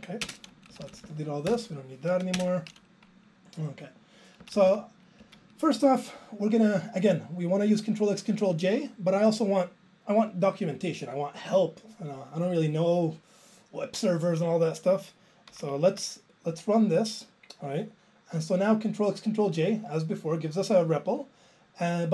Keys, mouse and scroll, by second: 0.2 ctrl+space, 0.7 Up, 0.8 Up, 1.0 Up, 1.5 BackSpace, 2.4 alt+space, 4.4 Down, 4.6 Down, 4.7 Down, 5.2 Left, 18.4 ctrl+e.